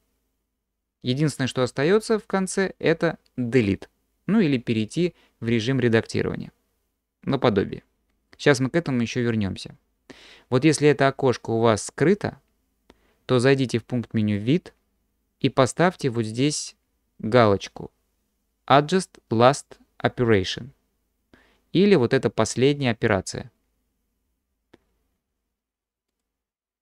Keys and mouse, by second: 14.4-26.3 drag.